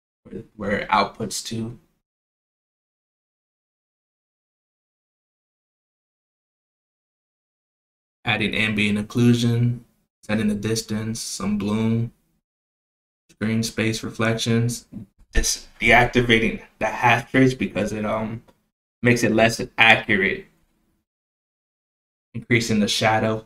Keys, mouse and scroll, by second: 1.0-2.0 drag, 2.7 click, 3.0 click, 7.7 click, 8.0 click, 8.5 click, 9.3 click, 10.0 click, 10.5 click, 11.1 click, 11.6 click, 11.9 click, 12.9 click, 13.7 click, 14.5 click, 15.2 click, 15.6 click, 17.0 click, 17.4 click, 17.7-18.6 drag, 19.1-19.9 drag, 20.4 click, 21.3 click, 22.0 click, 22.4-23.0 scroll down 1, 23.0 click, 23.3-23.4 drag.